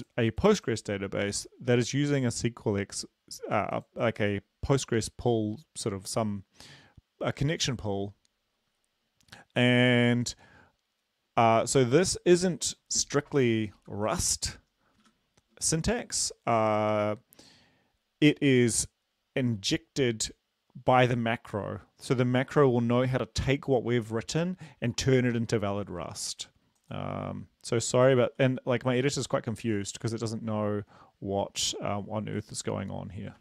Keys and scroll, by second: 14.0 Left, 15.2 shift+Home, 28.5 ctrl+s.